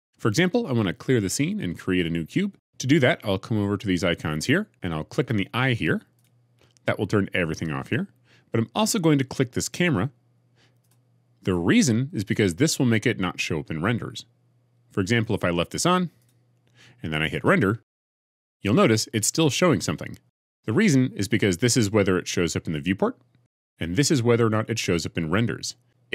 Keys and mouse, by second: 10.7 click, 16.1 click, 17.9 F12.